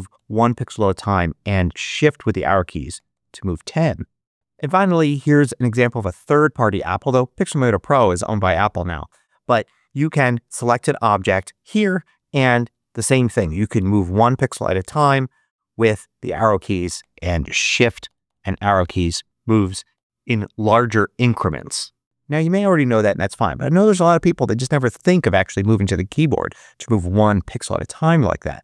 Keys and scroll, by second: 0.0 Down, 1.1 shift+Down, 1.3 shift+Left, 2.1 shift+Up, 2.8 shift+Right, 3.4 shift+Down, 12.3 Up, 12.9 Right, 13.7 Down, 14.5 Left, 16.3 shift+Left, 16.9 shift+Right, 17.6 shift+Up, 18.4 shift+Left, 20.7 shift+Right.